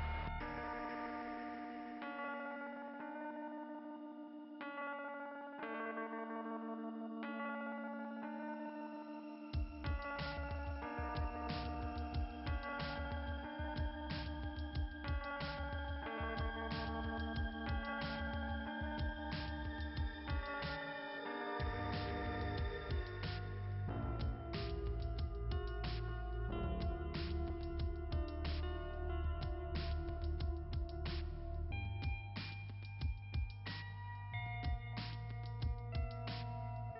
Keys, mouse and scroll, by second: 0.0 click, 0.2 click, 2.9 click, 7.4 right click, 9.2 click, 11.3 click, 11.9 click, 13.0 click, 17.1 click, 17.9 click, 20.4 click, 27.2 click, 27.5 click, 35.3 click, 35.5 click, 35.8 click, 36.2 click.